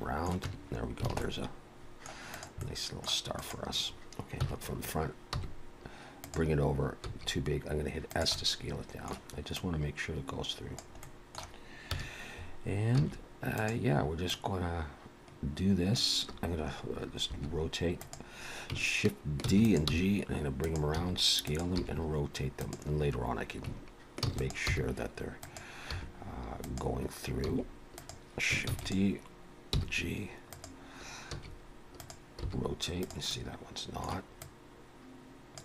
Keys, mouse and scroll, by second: 0.5 Tab, 0.8-1.1 scroll down 3, 1.1 alt+a, 1.2 middle click, 2.3 click, 2.6 middle click, 3.4 click, 4.4 KP_1, 5.3 g, 7.1 s, 8.3 middle click, 9.6 click, 11.0 middle click, 11.9 KP_1, 13.0 s, 14.3 click, 17.3 r, 19.5 shift+d, 19.9 g, 20.9 s, 21.8 r, 24.2 shift+d, 24.7 g, 25.9 r, 27.5 s, 28.7 shift+d, 29.7 g, 31.4 s, 32.4 r, 33.3 middle click, 34.4 click.